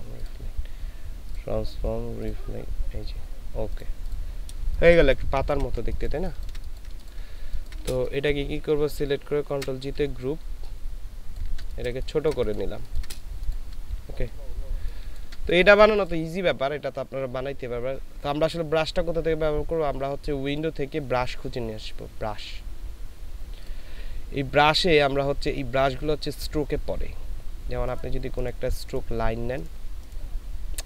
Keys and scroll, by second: 4.7 ctrl+space, 6.9 ctrl+space, 7.4 ctrl+space, 9.6 ctrl+g, 10.1 ctrl+shift+g, 11.9 ctrl+shift+g, 11.9 ctrl+shift+space.